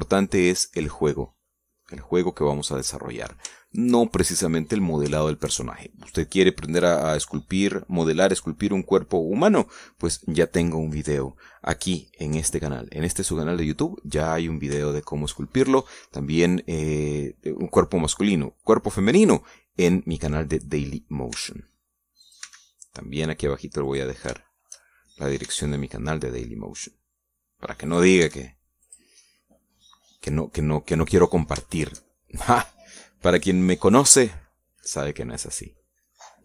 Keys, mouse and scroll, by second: 1.2 click, 2.3-4.3 middle drag, 4.3-5.3 shift+middle drag, 5.5 shift+scroll up 1, 6.0 shift+middle click, 15.1 scroll up 1, 15.7 shift+middle click, 16.6-17.8 middle drag, 22.1 e, 23.0 click, 23.2 s, 24.7 click, 25.1-26.2 shift+middle drag, 26.3 shift+middle click, 26.3 shift+e, 28.7 click, 29.1 s, 29.7 click, 30.1-32.2 middle drag, 32.3 shift+middle click, 32.9 shift+middle click, 34.9-36.4 middle drag.